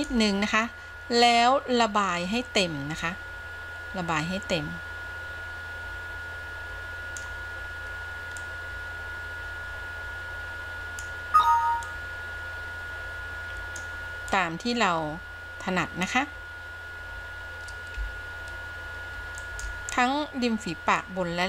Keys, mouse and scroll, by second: 0.1 f, 3.2-7.5 drag, 8.6-11.3 drag, 12.1-14.2 drag, 14.6-16.4 drag, 18.0 f, 19.6 f, 21.1-21.4 drag.